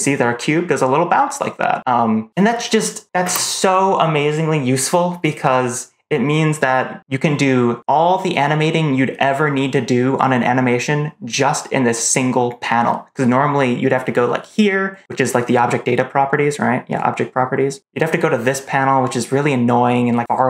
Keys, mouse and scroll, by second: 3.1 space.